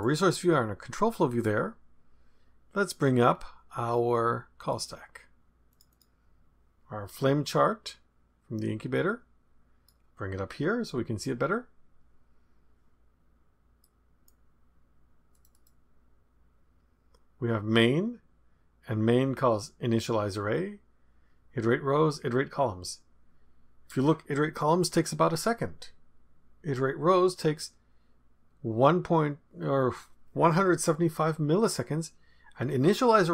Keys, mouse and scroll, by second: 1.3 click, 3.2-4.1 scroll down 1, 4.6 click, 5.7 click, 7.8-10.2 drag, 13.8 right click, 15.3 click.